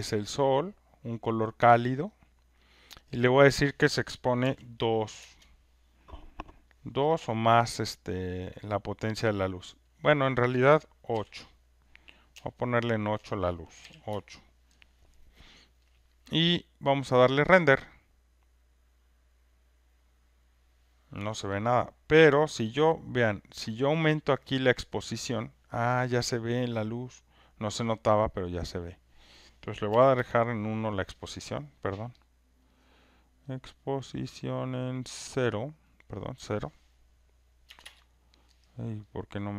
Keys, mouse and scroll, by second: 0.4 click, 2.1 click, 3.1 click, 4.4 typing, 5.2 Return, 6.2 Return, 9.4 click, 10.0 click, 11.1 8, 12.3 8, 12.3-13.1 BackSpace, 13.8 8, 14.1 Return, 17.0-22.2 drag, 25.4 click, 28.1 click, 28.8 click, 29.9 1, 30.1 Return, 32.2 click, 32.8 click, 35.4 click, 36.2 click, 37.8 Return, 39.3 click.